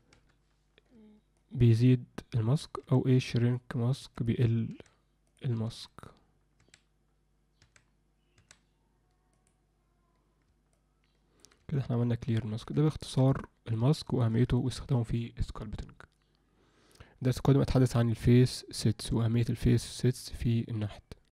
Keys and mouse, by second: 1.4 alt+middle click, 2.3 middle click, 5.2 click, 10.7 middle click, 11.7 alt+middle click, 13.0 ctrl+alt+middle click, 13.4 alt+middle click, 14.0 shift+middle click, 14.6 ctrl+alt+middle click.